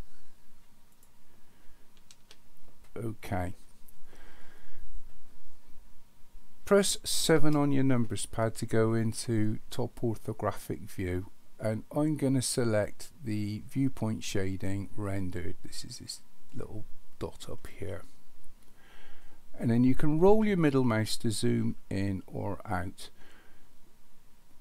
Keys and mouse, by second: 0.9 click, 2.2 n, 7.4 KP_7, 17.9 click.